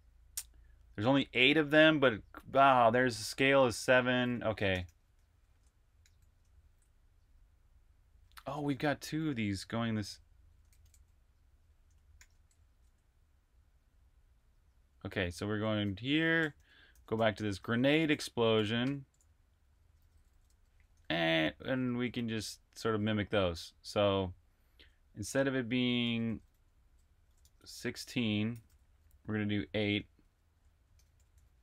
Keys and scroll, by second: 2.7 l, 4.5 typing, 6.0 shift+y, 10.3-12.0 typing, 12.5 super+`, 14.2 super+`, 15.3 super+`, 16.0-18.8 typing, 20.7 typing, 21.7-23.0 typing, 22.0 super+v, 24.4-31.6 typing.